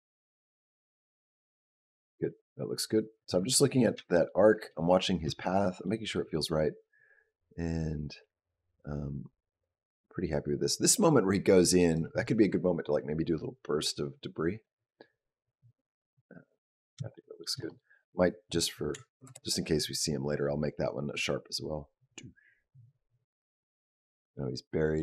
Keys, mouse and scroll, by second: 4.1 shift+middle click, 5.7 middle click, 6.9 click, 14.5 click, 17.0 shift+middle click, 17.4 click, 17.9 click, 18.7 s, 21.0 click.